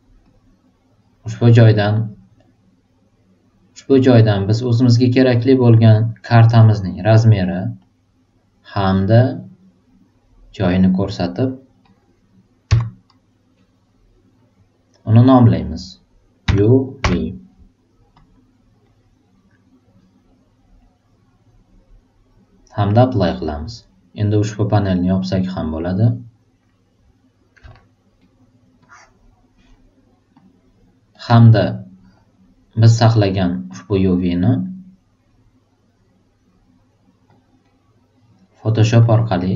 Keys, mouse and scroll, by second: 0.2 click, 4.9 click, 6.2 click, 6.9 click, 9.1 super+click, 10.6 super+click, 11.9 super+click, 16.4 super+u, 17.0 super+v, 18.1 super+click, 23.0 super+click, 25.2 super+click, 28.8 super+click, 30.3 super+click, 31.2-32.7 drag, 33.7 click, 34.4 click, 37.3 click, 39.0 click.